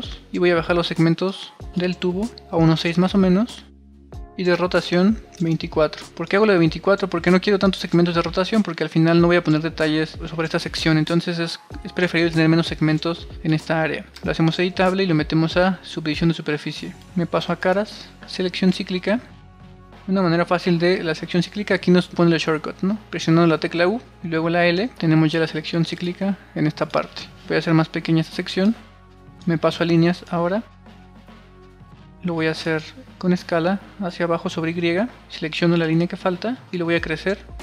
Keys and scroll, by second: 0.0 typing, 2.4 6, 2.4 Return, 5.9 2, 6.2 4, 6.3 Return, 7.8 1, 8.2 1, 8.2 1, 14.1 c, 23.7 u, 24.6 l.